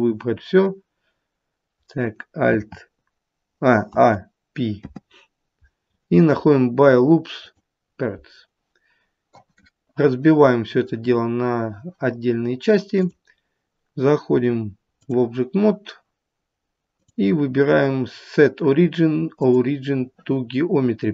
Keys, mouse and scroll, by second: 3.8 a, 4.7 p, 13.0 click, 17.0 click.